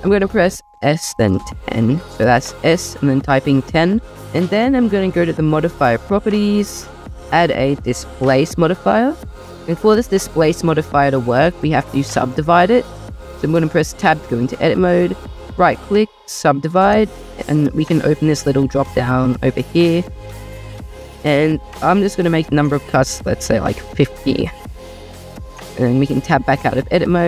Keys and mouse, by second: 0.7 Escape, 0.8 s, 1.1 1, 1.5 0, 5.7 click, 7.4-8.7 drag, 12.6 click, 14.4 Tab, 15.3-16.3 drag, 18.8 click, 21.1-23.8 drag, 25.4 Tab.